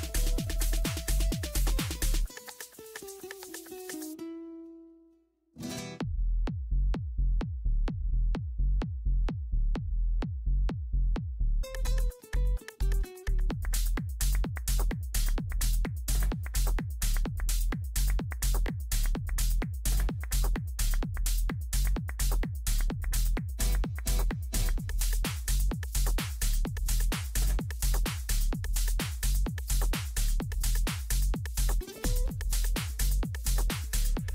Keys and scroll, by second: 0.0 Up.